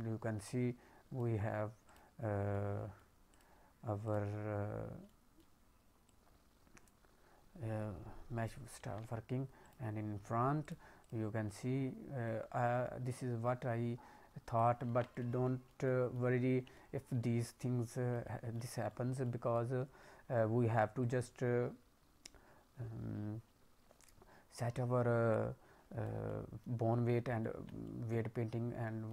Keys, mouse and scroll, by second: 1.8 click, 2.5 middle click, 3.2 click, 4.0 click, 5.1 alt+middle click, 6.0 click, 8.9 ctrl+z, 9.6 click, 10.6 click, 11.0 click, 12.2 click, 14.9 ctrl+z, 15.0 middle click, 15.4 alt+middle click, 15.8 middle click, 16.7 alt+middle click, 17.9 middle click, 18.2 alt+middle click, 18.8 middle click, 19.2 alt+middle click, 19.7-21.0 scroll up 3, 21.0 click, 26.2 middle click, 27.4 alt+middle click, 27.8 middle click, 28.8 middle click.